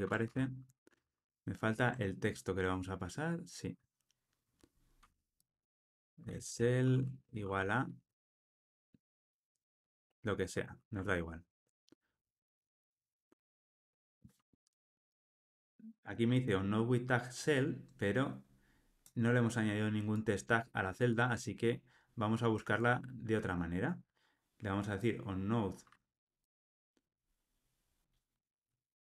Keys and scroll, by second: 0.2 Escape, 1.0 super+p, 4.9 Escape, 12.4 Tab, 13.5 alt+super+l, 13.9 ctrl+alt+o.